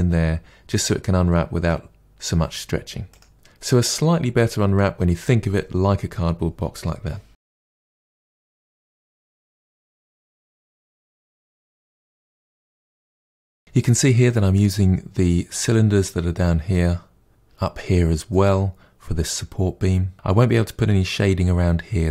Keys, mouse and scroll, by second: 2.9 click, 3.8 KP_Divide, 4.0 middle click, 4.1 scroll up 1, 4.2 Tab, 4.4 Tab, 4.7 KP_Divide, 4.9 middle click, 5.1 scroll down 2, 5.2 middle click, 6.4 3, 6.4 click, 6.8 Delete, 7.1 middle click, 7.4 click, 7.8 ctrl+e, 7.8 middle click, 8.1 2, 8.2 alt+click, 8.5 ctrl+e, 8.7 a, 8.8 u, 9.1 KP_Divide, 9.3 scroll down 2, 9.4-10.6 shift+middle drag, 10.6 Tab, 10.8 click, 11.0 KP_Decimal, 11.2 scroll down 2, 11.3 shift+middle click, 11.7 click, 11.8-12.4 shift+middle drag, 12.4 scroll down 1, 12.5 middle drag, 12.7 Tab, 13.0-14.0 scroll down 1, 15.7-16.7 scroll down 1, 16.7-20.1 middle drag.